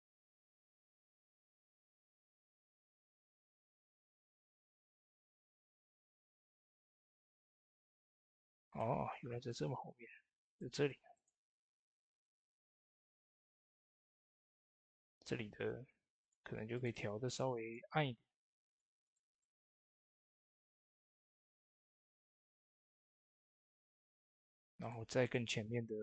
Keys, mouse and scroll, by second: 1.9 click, 3.2 typing, 7.3-7.7 scroll down 2, 8.5-21.9 drag, 21.9-22.4 typing, 22.4 click, 22.4 click, 24.6-26.0 drag.